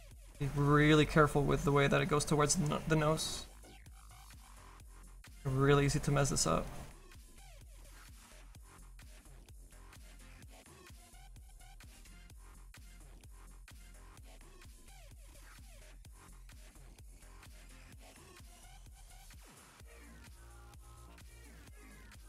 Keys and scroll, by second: 15.2 s, 16.5 s.